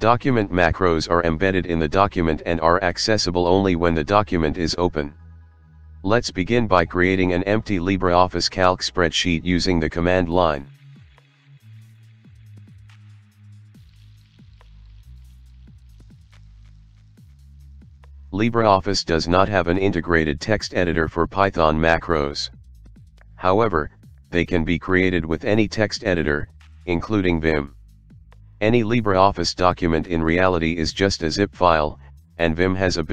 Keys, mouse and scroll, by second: 0.0-0.3 typing, 0.4 Tab, 0.9 Return, 1.5-3.5 typing, 4.6-10.7 typing, 12.8-16.1 typing, 16.5 Return, 20.0 ctrl+5, 21.0 click, 26.5 ctrl+5, 27.2-29.3 typing, 29.4 Tab, 30.0 Return.